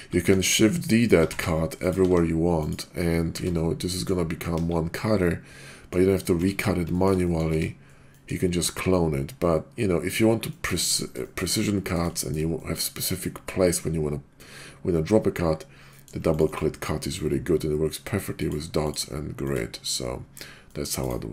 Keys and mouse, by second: 0.3-2.0 typing, 1.8 shift+click, 2.6 click, 3.3 Tab, 3.8 middle click, 4.5 KP_5, 5.1-5.9 middle drag, 6.8 Tab, 7.2 middle click, 7.5 Tab, 8.1 middle drag, 8.8-10.2 middle drag, 10.5-10.9 middle drag, 11.5-11.9 middle drag, 12.1 shift+middle click, 12.5 middle drag, 15.9 middle drag, 16.3 ctrl+click, 18.3 click, 18.8 click, 19.3 click, 20.7 middle drag, 21.0-21.3 drag.